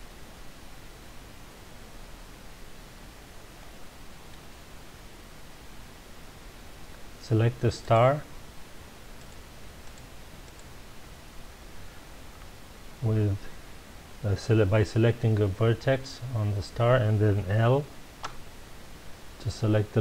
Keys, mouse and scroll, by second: 3.6-6.6 middle drag, 7.8 click, 9.2 click, 9.8 click, 10.4 click, 18.2 l.